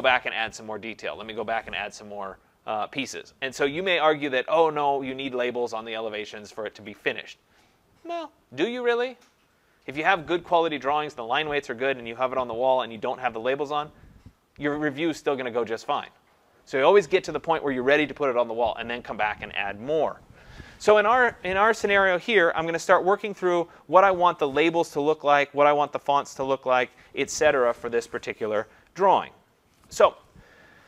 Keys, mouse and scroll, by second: 23.3 click, 26.0 click.